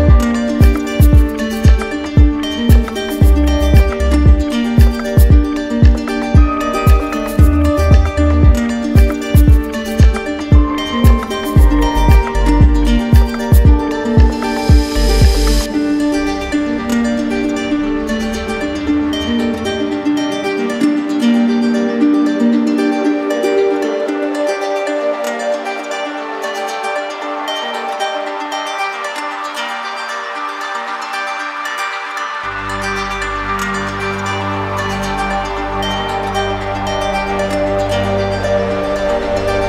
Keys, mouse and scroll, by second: 0.3 click, 1.2 alt+click, 2.1 ctrl+click, 3.7 ctrl+click, 4.6 alt+click, 9.1 click, 9.9 alt+click, 13.1 click, 13.6 shift+click, 14.3 alt+click, 15.3 alt+click, 15.9 alt+click, 16.5 z, 17.7 click, 19.3 q, 20.0 ctrl+click, 21.0 alt+click, 21.9 alt+click, 22.8 alt+click, 26.3 click, 29.3-31.6 drag, 32.2-34.5 drag, 35.1 alt+click.